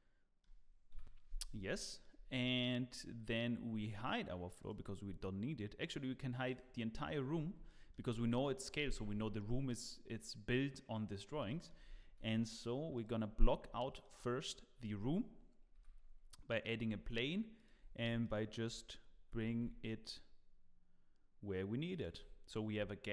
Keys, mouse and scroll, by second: 0.9 KP_7, 1.6 scroll down 2, 1.8 shift+middle click, 4.6 click, 6.5 click, 7.3-7.7 scroll up 3, 7.7 shift+middle click, 11.4 shift+middle click, 12.1 shift+a, 13.4 scroll up 2, 13.8 shift+middle click, 15.7 g, 17.8 scroll up 6, 18.2 shift+middle click, 19.3 g, 22.2-22.8 scroll down 2, 22.7 scroll up 3.